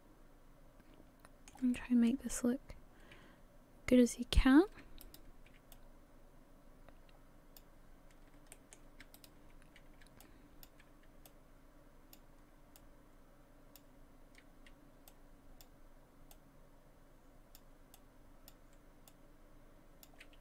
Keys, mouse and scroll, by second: 1.7 shift+middle click, 2.3-4.8 scroll up 3, 5.0 shift+right click, 5.7 click, 8.5 shift+middle click, 9.1 shift+right click, 10.2 shift+click, 11.3 click, 12.8 click, 13.0 shift+click, 15.1 click, 16.3 click, 18.0 click, 19.1 click.